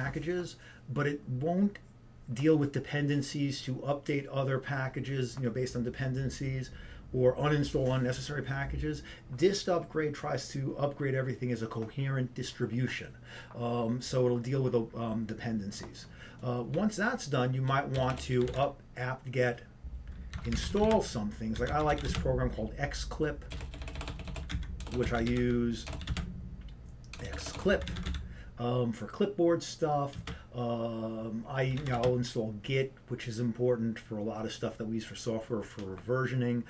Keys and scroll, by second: 18.3-19.1 typing, 20.3-21.0 typing, 23.1 typing, 24.5-25.8 typing, 27.7-28.9 typing, 30.3 typing, 33.4 typing.